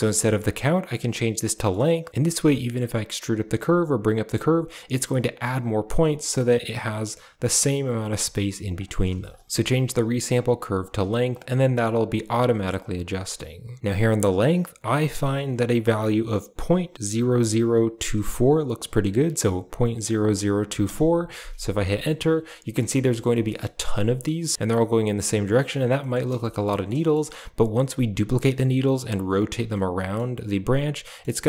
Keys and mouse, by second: 1.4 shift+middle click, 2.1 g, 4.2 g, 6.1 shift+middle click, 8.1 g, 9.1 typing, 9.7 click, 10.6 click, 11.2 click, 11.8 click, 12.0 g, 13.7 middle click, 14.2-15.5 drag, 17.2 0, 20.3 right click, 23.6 middle click, 25.0 Tab, 25.6 middle drag, 25.7 a, 26.4 shift+middle drag, 26.8 middle click, 27.0 shift+middle click, 29.7-30.1 middle drag, 31.1 middle click, 31.3 shift+middle click.